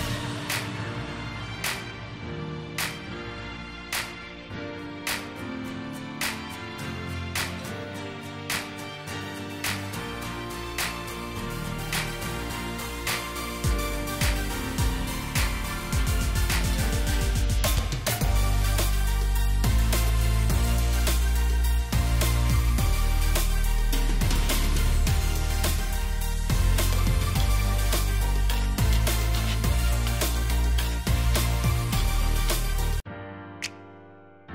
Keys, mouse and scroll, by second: 0.3 shift+click, 5.0 alt+scroll down 1, 5.8 alt+scroll, 6.2-6.5 alt+scroll down 1, 9.0-9.4 alt+scroll up 1, 10.3 alt+scroll down 1, 10.8 right click, 16.7 alt+click, 18.4 right click, 23.7 Delete, 24.9 alt+scroll, 24.9 alt+scroll down 1, 25.6 space, 26.3 alt+scroll, 26.3 alt+scroll down 1, 29.4 alt+scroll up 1, 31.7 right click.